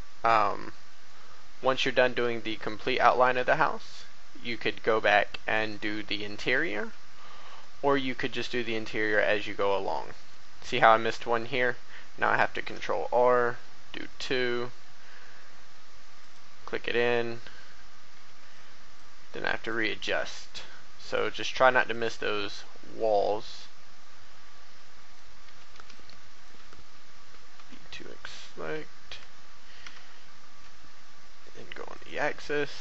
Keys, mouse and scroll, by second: 0.2-0.6 scroll up 1, 1.0 shift+middle click, 2.0 shift+e, 3.0 y, 5.5 click, 6.6 a, 6.8 b, 7.4 right click, 8.0 shift+middle click, 9.8 shift+middle click, 12.5 ctrl+r, 13.4-14.5 scroll up 1, 14.5-15.7 middle drag, 16.2 click, 18.1 a, 18.4 b, 18.5-21.4 drag, 21.4 typing, 21.9-25.4 drag, 25.4 a, 25.9 click, 27.5 x, 29.8 e, 30.4 x, 31.9 click, 32.6 shift+middle click.